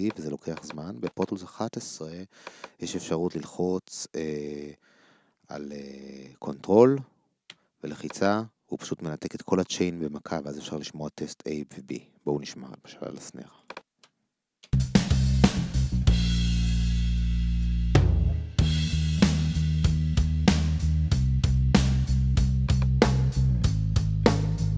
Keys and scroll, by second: 14.6 ctrl+space.